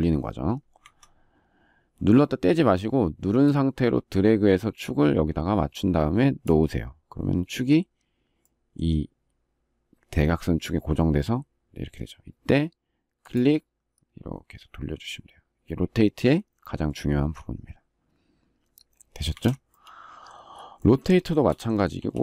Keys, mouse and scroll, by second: 0.5 Escape, 18.9 space, 19.0 Escape, 20.8 shift+middle click, 21.7 q.